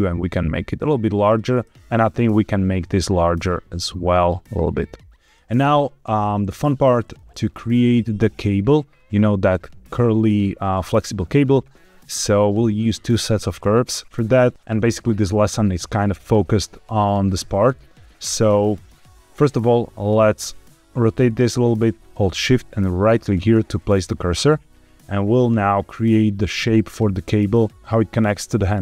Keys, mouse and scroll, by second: 1.4 click, 1.7 Escape, 2.0 click, 2.8 s, 5.2 click, 5.7-6.5 middle drag, 11.8 middle click, 14.0-14.5 scroll down 1, 14.5 shift+middle click, 20.1-21.3 middle drag, 23.1 shift+right click, 24.2-24.9 middle drag.